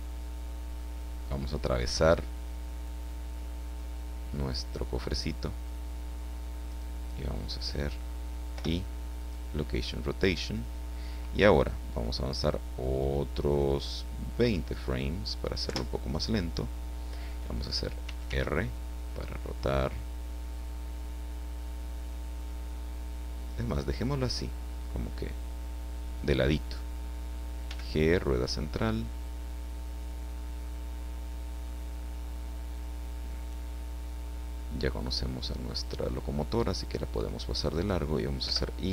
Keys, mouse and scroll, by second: 6.7 click, 8.5 i, 9.2 click, 14.4 click, 15.6 Left, 18.0 r, 24.3 click, 27.6 g, 27.9 click, 28.0 middle click, 37.8 click, 38.4 i.